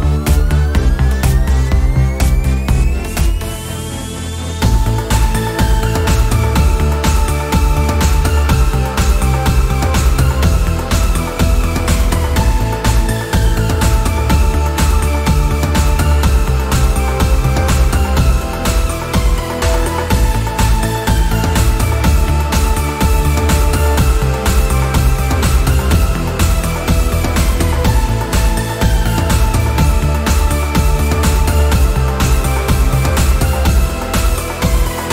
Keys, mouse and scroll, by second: 0.6-1.0 scroll down 1, 1.0 click, 2.1-2.5 scroll down 1, 2.7 ctrl+0, 3.4-4.1 scroll up 1, 4.3 click, 5.8-6.2 scroll up 1, 6.4 click, 7.7-8.1 scroll down 1, 8.2-15.8 drag, 16.6 scroll up 1, 17.1 click, 17.6-24.5 drag, 24.7 scroll down 1, 24.8 scroll up 1, 24.9 scroll down 1, 25.2-26.0 scroll up 2, 25.5 click, 26.0-26.9 scroll down 1, 26.9 click, 31.5-32.8 scroll up 1, 32.8-35.1 drag.